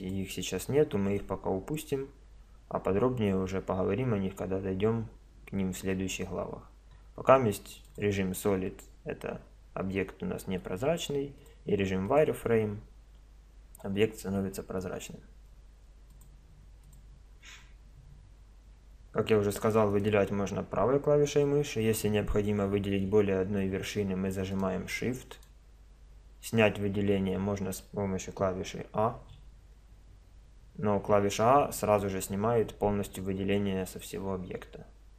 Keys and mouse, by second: 0.0 click, 1.6 click, 8.7 click, 8.8-10.6 middle drag, 11.4-13.0 drag, 13.0 middle click, 14.2 middle click, 15.2 middle click, 16.1-18.0 drag, 19.9-21.7 drag, 24.6-27.2 drag, 29.2 a.